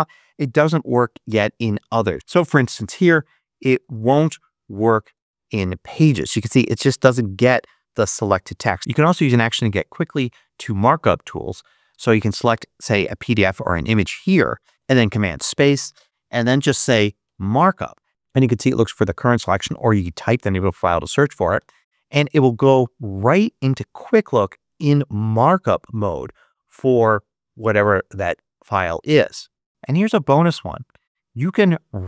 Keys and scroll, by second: 2.5-3.8 typing, 5.0 Return, 14.7 ⟲, 14.9 super+space, 16.0-17.9 typing, 21.4 Return.